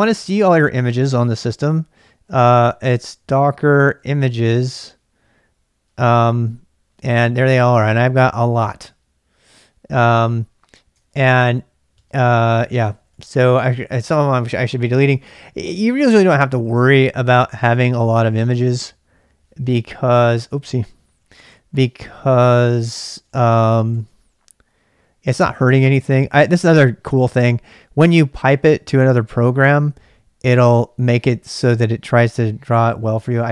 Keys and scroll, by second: 2.0-4.7 typing, 5.9 typing, 6.0 Return, 7.9 typing, 11.0 ctrl+[, 11.1 k, 12.0 space, 12.9 ctrl+[, 13.1 k, 17.0-18.9 typing, 20.8-24.4 typing, 27.6 typing.